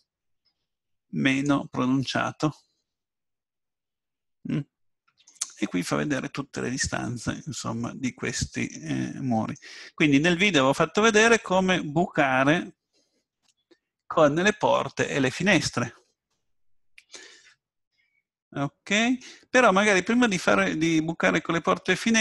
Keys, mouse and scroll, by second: 2.1-4.0 middle drag, 7.9-11.9 middle drag, 16.7-22.2 middle drag.